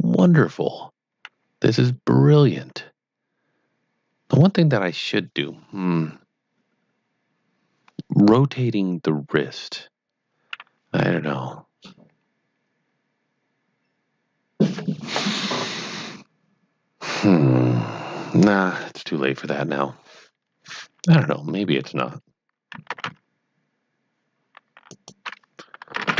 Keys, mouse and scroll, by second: 0.1 middle click, 22.6-23.5 typing, 24.8 click.